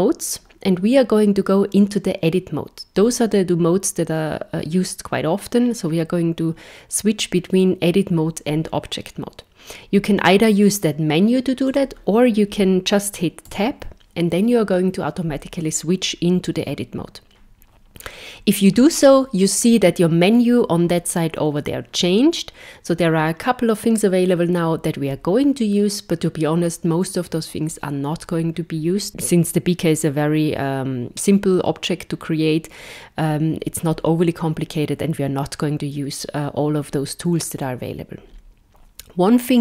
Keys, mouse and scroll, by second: 13.5 a.